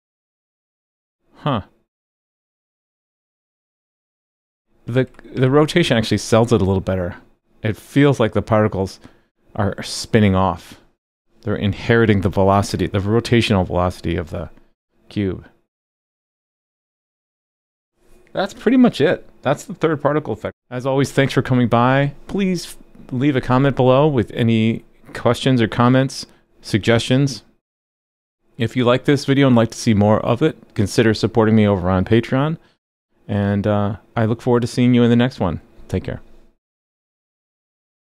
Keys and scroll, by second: 5.1 super+/, 5.3 super+s.